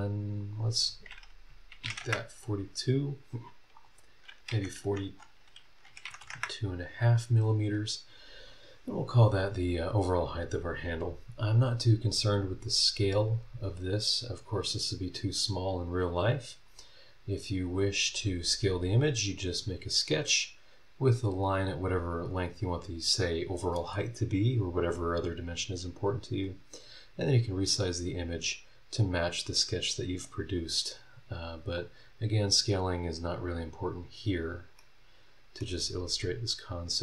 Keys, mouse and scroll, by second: 0.4 click, 1.7 KP_4, 1.8 KP_2, 2.0 KP_Enter, 3.6 click, 4.5 KP_4, 5.9 KP_2, 6.0 KP_Decimal, 6.2 KP_5, 6.4 KP_Enter, 31.7 click, 32.6 scroll down 1, 33.2 scroll up 1, 33.9-34.5 scroll down 4, 34.8 middle click, 35.4-35.8 scroll up 2.